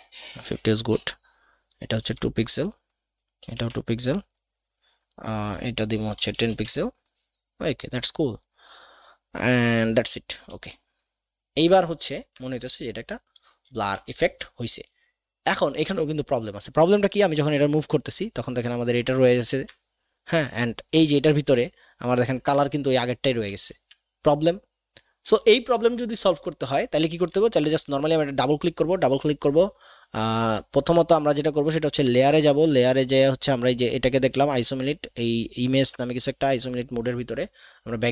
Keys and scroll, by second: 1.9 KP_2, 2.0 Tab, 3.4 KP_2, 3.5 Tab, 6.3 KP_1, 6.3 KP_0, 6.5 Tab, 23.7 ctrl+z.